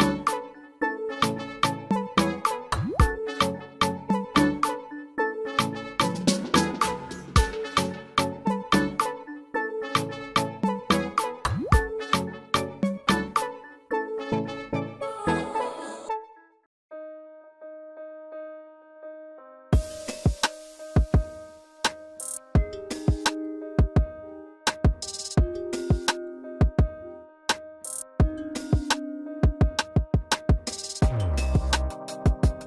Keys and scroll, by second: 6.5 ctrl+z, 13.8 ctrl+alt+space, 17.4 alt+s, 20.9 ctrl+alt+space.